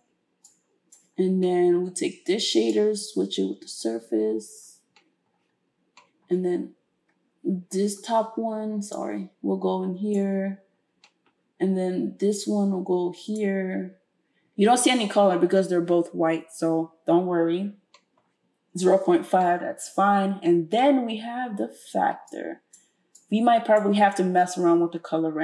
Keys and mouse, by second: 0.5-10.3 drag.